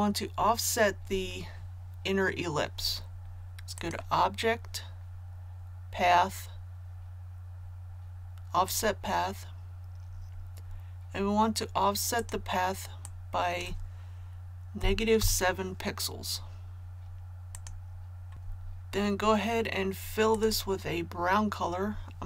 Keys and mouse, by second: 3.7 click, 15.2 KP_7, 17.5 click.